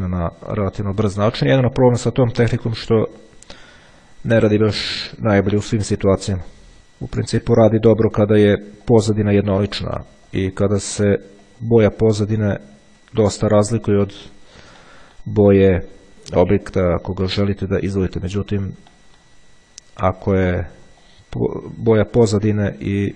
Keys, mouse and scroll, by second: 0.7 click, 1.6 click, 3.3 click, 4.5 click, 5.3 click, 6.8 click, 9.0 click, 10.3 click, 11.7 click, 13.0 click, 14.5 click, 16.7 click, 18.5 click, 19.2 middle click, 21.3 click, 22.3 click.